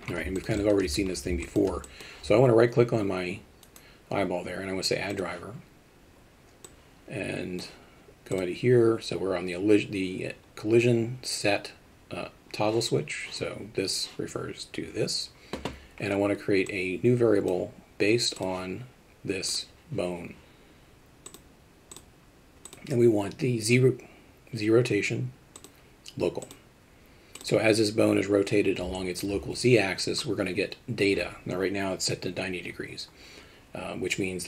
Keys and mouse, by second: 0.3 alt+shift+middle drag, 0.6 alt+middle drag, 1.5 alt+shift+middle drag, 1.8 middle click, 3.7-5.3 right drag, 6.6 click, 8.3 click, 16.6 click, 18.4 click, 21.4 click, 22.8-25.6 drag, 26.4-27.4 drag, 28.9 alt+shift+middle drag.